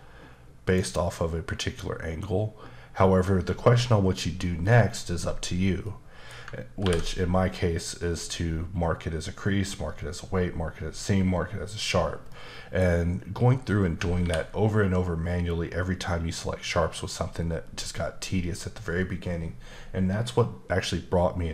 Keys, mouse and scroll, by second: 5.8 middle click, 6.8 ctrl+e, 12.3 middle click, 12.9-14.0 scroll up 1, 14.2 ctrl+e.